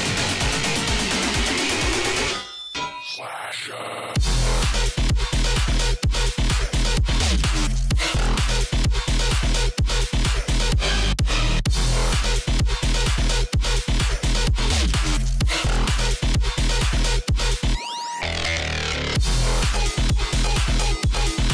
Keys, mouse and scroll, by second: 0.2 click, 0.6 space, 2.6 click, 4.8 alt+click, 7.8 ctrl+d, 9.7 ctrl+z, 10.8 click, 11.3 alt+scroll down 1, 11.6 click, 12.4 alt+scroll up 1, 12.6 click, 12.8 space, 14.6 click, 15.7 space, 19.8 alt+scroll up 1, 19.9 space, 20.0 click, 20.1 space.